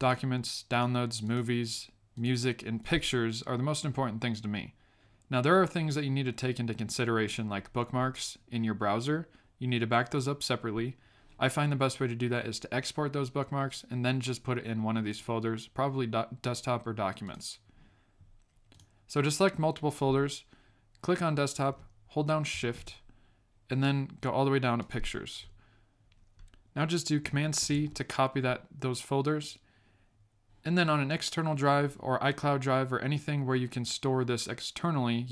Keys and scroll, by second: 27.6 super+c.